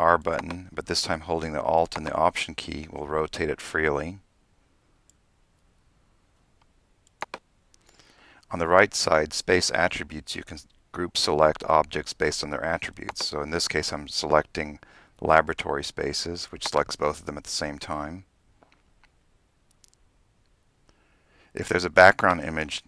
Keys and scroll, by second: 1.6 r.